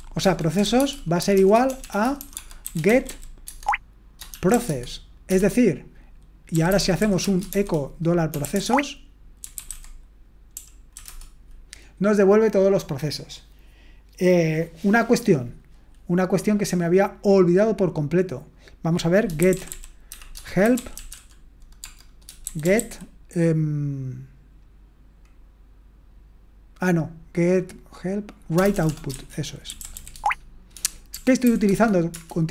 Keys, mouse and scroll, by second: 0.0-11.1 typing, 19.2-23.3 typing, 28.6-31.6 typing, 31.7 Tab, 32.1 Return.